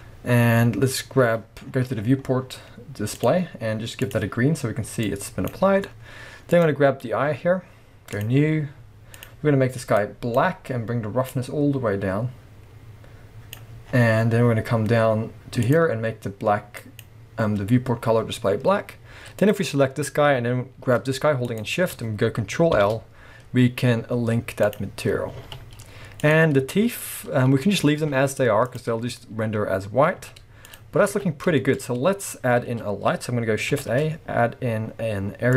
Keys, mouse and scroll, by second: 1.6-3.2 scroll down 1, 3.2 click, 3.4-4.0 scroll down 2, 5.8 scroll up 1, 6.5 click, 8.1-9.2 drag, 11.3-15.7 drag, 13.8-15.7 scroll down 2, 18.6-19.4 scroll up 1, 19.4 click, 21.4 shift+click, 22.8 ctrl+l, 25.2 scroll down 1, 25.3 alt+a, 25.7 scroll up 1, 26.2 click, 27.8 scroll down 1, 28.0 z, 29.6-30.2 scroll up 1, 30.2 z, 30.9 scroll down 1, 31.1 alt+a, 31.6-35.5 shift+middle drag, 31.8-32.5 scroll up 1, 32.5-33.0 scroll down 1, 33.8 shift+a.